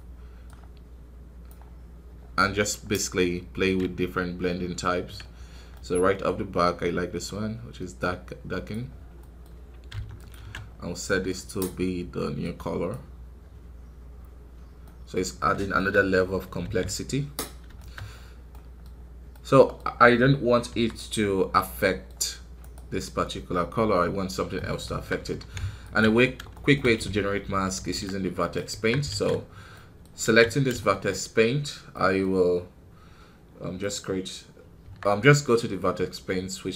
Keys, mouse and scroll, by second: 2.0 scroll up 3, 3.9-4.2 ctrl+scroll down 1, 5.3 scroll down 1, 5.6 middle click, 5.9 scroll up 2, 7.2-10.6 drag, 10.6 scroll down 1, 11.0 middle click, 11.2 scroll up 1, 12.8-14.7 drag, 14.7 middle click, 15.3-15.7 scroll down 2, 15.7 shift+middle click, 16.1-17.2 scroll up 1, 17.2 scroll down 3, 17.7 shift+middle click, 17.9 scroll up 3, 18.4 middle click, 18.8-19.2 scroll up 2, 19.2-20.3 middle drag, 20.3-20.6 scroll down 3, 20.6 KP_1, 21.3-21.7 scroll down 2, 21.7 middle click, 22.0-22.5 scroll up 1, 22.5-24.1 right drag, 24.1-24.5 scroll down 3, 24.5 middle click, 24.8 Tab, 25.1 Tab, 25.9 z, 26.4-27.9 shift+middle drag, 27.9 ctrl+Tab, 28.3 middle click, 28.6 Tab, 29.0 alt+a, 29.6 middle click, 30.1 a, 30.7 shift+middle click, 31.2 scroll down 2, 31.9 middle click, 32.2 scroll up 2, 34.7 Tab.